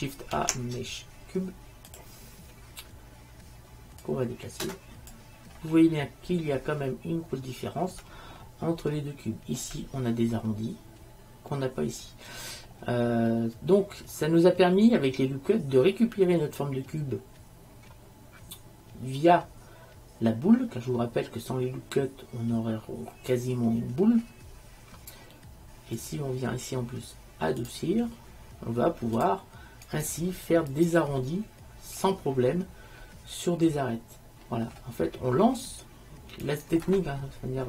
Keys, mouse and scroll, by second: 0.5 shift+a, 3.9 shift+a, 4.1-6.4 drag, 6.4-7.4 middle drag, 7.4 click, 8.5-9.1 right drag, 11.8 click, 11.8 right click, 12.3-15.5 middle drag, 18.7-19.2 middle drag, 26.1-28.1 right drag, 27.7-31.0 drag, 30.0-31.0 right drag, 31.1 right click, 31.3 click, 31.3 middle click, 31.8 middle click, 33.6-34.7 middle drag, 36.6-37.6 right drag.